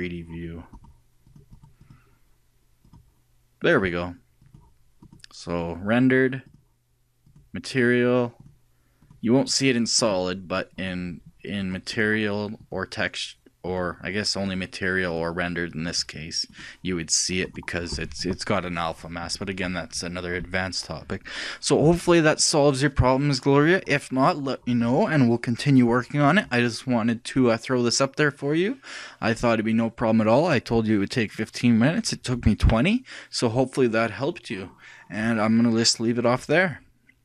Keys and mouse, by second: 0.5 click, 6.3 middle click, 10.9-12.0 drag, 12.8-13.9 drag, 16.6-18.4 drag, 18.4-37.2 middle drag.